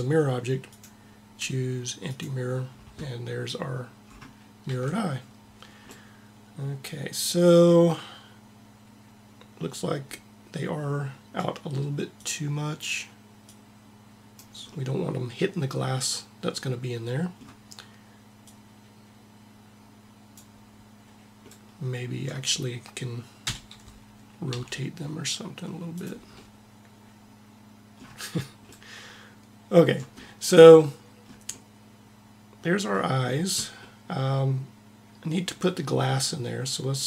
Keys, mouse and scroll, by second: 0.5-2.3 drag, 3.9-5.8 middle drag, 4.4 a, 11.9-14.6 drag, 14.6 middle click, 15.4 middle click, 18.1 middle click, 18.3-20.0 drag, 21.1 middle click, 23.2 KP_7, 24.3 r, 32.6-35.5 middle drag.